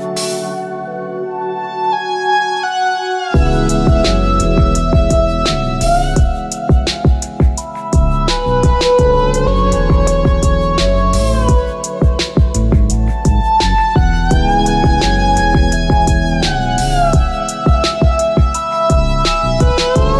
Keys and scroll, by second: 5.9 Return.